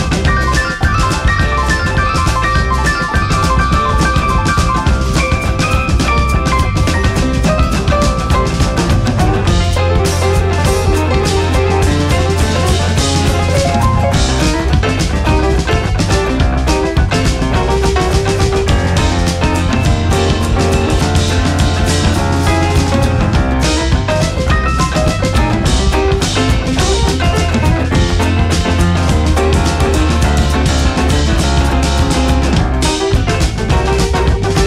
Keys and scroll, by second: 10.8 Delete, 16.9 ctrl+a, 24.3 Right, 30.3 Down, 33.0 Up.